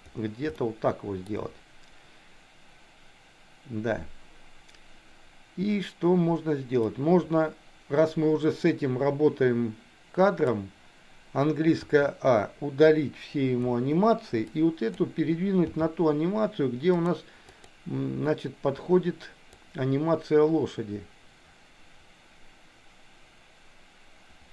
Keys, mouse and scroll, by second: 0.5 shift+middle click, 7.0-10.8 drag, 11.8 a, 13.7 Delete, 14.4 click, 15.8 g, 17.6-18.7 drag, 19.5-24.5 drag.